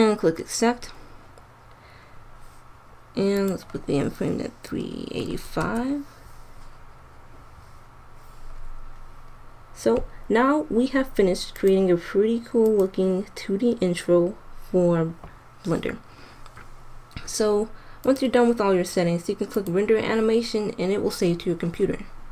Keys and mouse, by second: 11.5-14.4 drag, 18.0-19.9 drag.